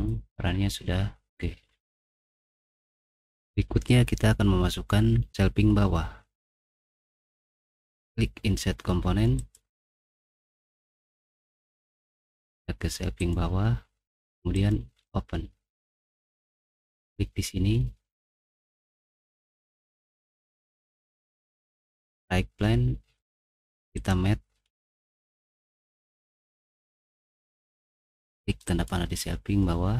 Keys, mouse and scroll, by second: 0.3 middle click, 1.8 middle click, 2.7 ctrl+7, 9.7 click, 11.8 middle click, 13.2 click, 14.5 click, 15.6-16.6 scroll down 2, 16.6 click, 22.0 click, 23.9 click, 28.7 click.